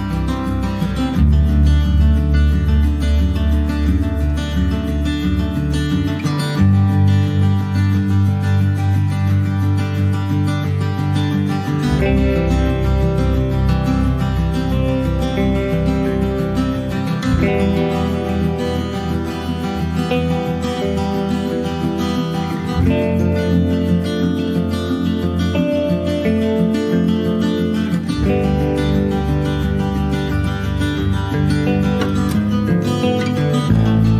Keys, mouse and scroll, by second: 1.0-3.3 drag, 3.3-3.7 scroll down 2, 4.5-6.2 drag, 6.6 shift+middle click, 7.3 click, 7.9 scroll down 2, 8.2-11.5 middle drag, 11.5-13.0 drag, 14.7-16.2 drag, 19.2-21.7 drag, 21.7 scroll down 2, 22.0 middle click, 22.2 scroll up 1, 22.4 click, 22.7 middle click, 22.8 scroll up 1, 23.0 shift+middle click, 23.8 ctrl+s, 24.2 shift+middle click, 25.0 ctrl+s, 29.0 click, 29.5 scroll up 4, 29.8-32.7 middle drag, 32.7 ctrl+v.